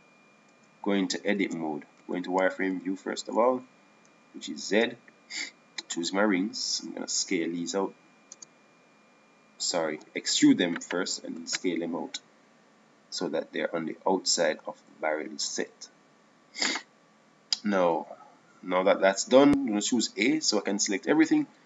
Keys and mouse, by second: 1.1 Tab, 2.1 Tab, 2.7 Tab, 2.9 Tab, 3.5 z, 5.8 z, 7.0 Tab, 9.1 s, 11.7 e, 13.0 s, 19.4 KP_1.